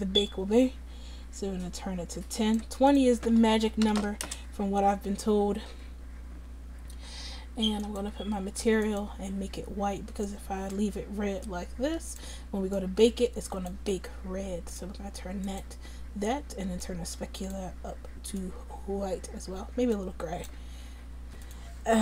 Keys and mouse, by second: 2.9-17.3 drag, 21.5-22.0 drag.